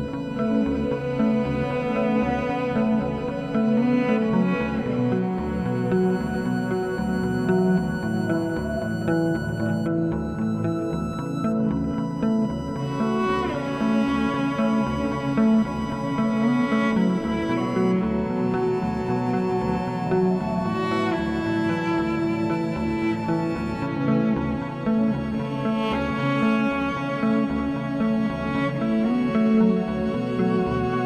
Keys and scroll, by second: 1.5 s, 3.5 s, 10.9 4, 11.3 s, 12.2 4, 15.5 s, 20.9 2, 21.3 s, 30.7 s.